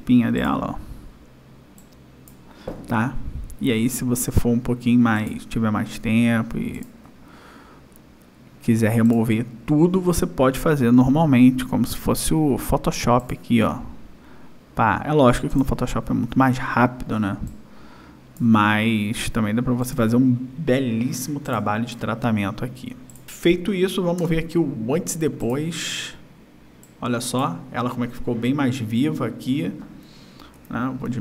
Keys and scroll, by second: 23.5 space, 25.1 y.